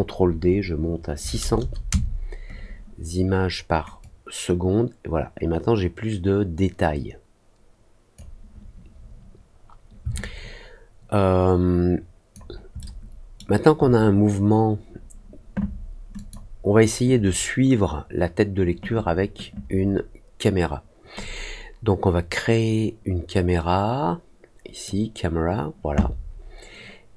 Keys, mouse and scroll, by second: 3.9-8.1 drag, 10.1-12.3 alt+drag, 12.7 alt+middle click, 16.1 click, 21.1-24.8 drag.